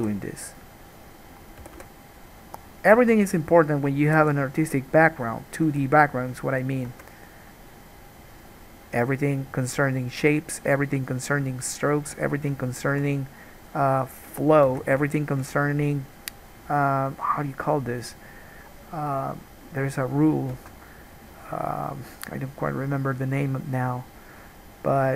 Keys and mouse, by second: 0.0 g, 1.0 middle click, 1.8 g, 3.3 alt+a, 3.4-6.6 drag, 3.6 middle click, 3.6 right click, 4.3 g, 5.5 middle click, 5.5 right click, 5.8 g, 6.6 right click, 6.7 click, 7.1 alt+a, 7.2 right click, 7.5-13.6 drag, 15.0 alt+a, 20.7 alt+a.